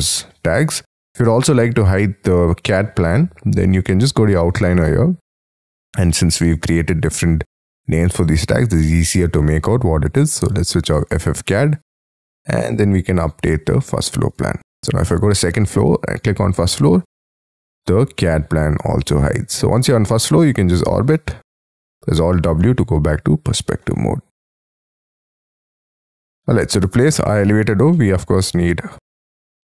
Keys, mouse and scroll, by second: 12.6 right click, 14.3 double click, 20.1 middle click, 21.3 scroll down 6, 21.9 alt+w, 22.6 middle click, 26.0 scroll up 6, 26.4 middle click, 27.3-27.9 scroll up 11, 28.0 middle click.